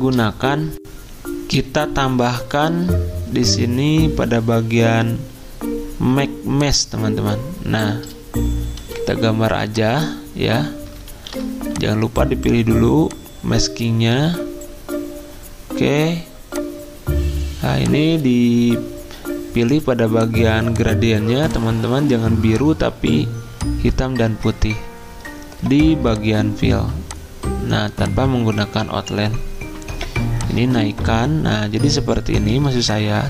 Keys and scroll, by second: 8.7 m, 11.1 ctrl+z, 29.9 g.